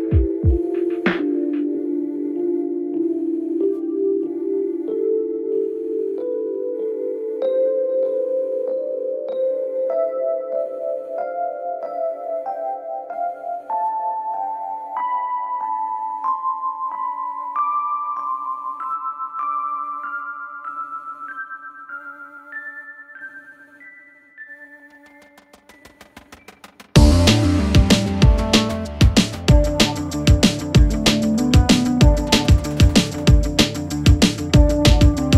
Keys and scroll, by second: 5.8 Delete, 10.9 ctrl+z, 12.6 Escape.